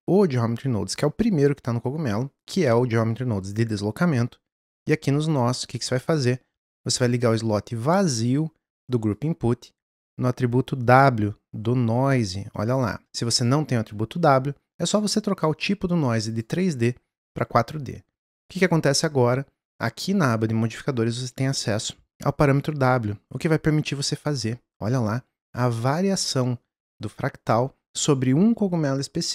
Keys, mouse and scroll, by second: 5.6 click, 9.1 click, 16.3-17.4 drag, 18.4 click, 22.6-25.8 drag.